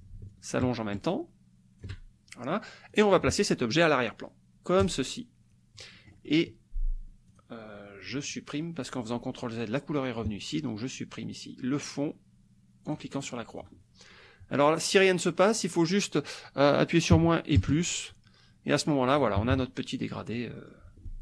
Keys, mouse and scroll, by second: 0.3-2.0 ctrl+shift+drag, 2.9 click, 4.8 click, 5.9-7.5 drag, 8.3 click, 12.9 click, 13.5 click, 15.0 click, 17.1 KP_Subtract, 17.6 KP_Add, 18.7 click, 19.4 KP_Subtract, 20.1 click, 20.7 click, 20.9 click.